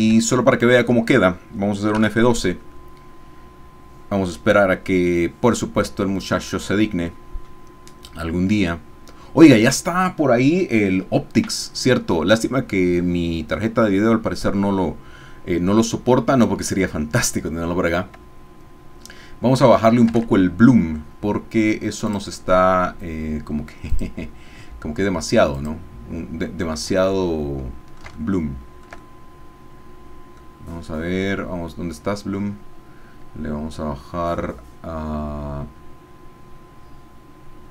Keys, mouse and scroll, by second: 0.2 shift+click, 0.3 shift+middle click, 2.0 F12, 20.3 alt+Tab, 22.1 click, 23.9 click, 25.5-26.5 drag, 27.1-30.5 ctrl+middle drag, 28.1 ctrl+shift+scroll up 1, 29.0 shift+scroll up 1.